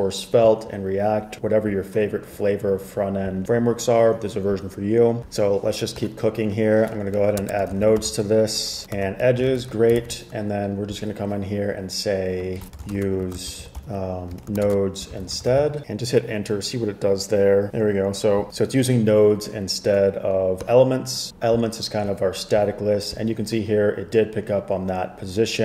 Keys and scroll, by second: 7.5-9.6 typing, 9.6 super+s, 10.1 super+c, 12.5-16.3 typing.